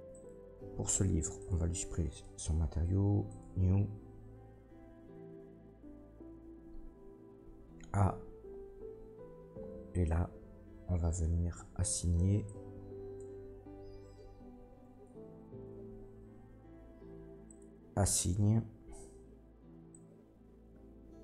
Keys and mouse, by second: 0.1 middle click, 6.5 Tab, 6.9 Tab, 7.4 a, 14.9 Tab, 15.9-21.2 drag, 15.9 a.